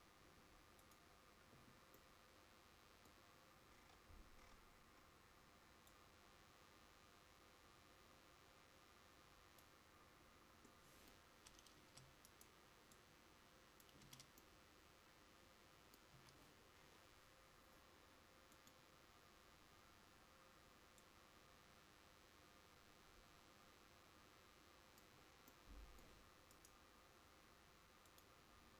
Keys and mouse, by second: 11.9 Tab, 16.3 a.